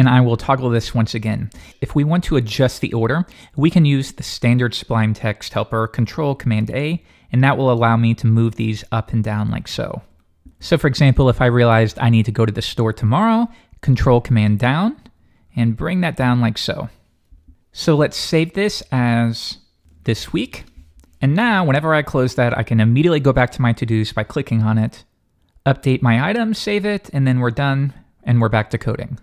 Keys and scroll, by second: 6.8 ctrl+super+Up, 7.4 ctrl+super+Down, 9.6 ctrl+super+Up, 10.4 Up, 14.6 ctrl+super+Down, 14.9 ctrl+super+Up, 15.1 ctrl+super+Down, 25.3 super+d, 26.4 super+s, 26.7 super+w.